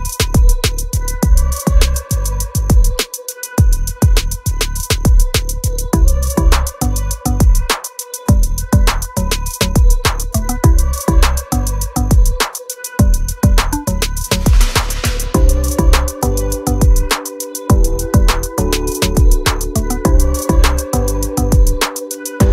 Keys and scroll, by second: 0.0 Up, 0.7-3.1 typing, 3.9 Up, 4.5-5.4 typing, 6.9-8.1 typing, 22.3 space.